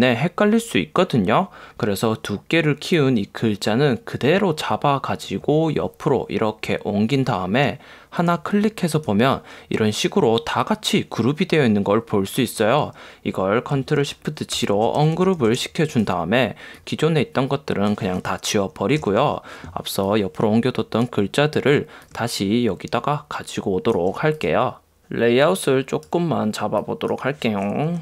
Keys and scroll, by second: 19.2 BackSpace.